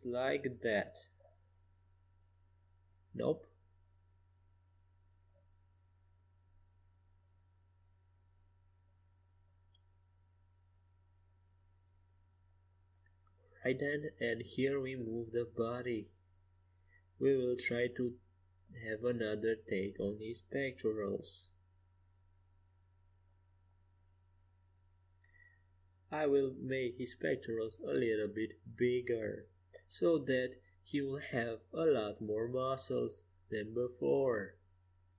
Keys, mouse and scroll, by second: 0.7-2.1 middle drag, 3.5 ctrl+shift+z, 5.5 ctrl+z, 9.4-11.3 typing, 13.2-15.4 middle drag, 15.4 g, 16.4 a, 17.3 a, 17.8 a, 18.4 Tab, 23.4-25.9 middle drag, 26.1-29.6 right drag, 27.0 g, 30.6 middle click, 31.2-32.5 right drag, 31.4 g, 33.6 g.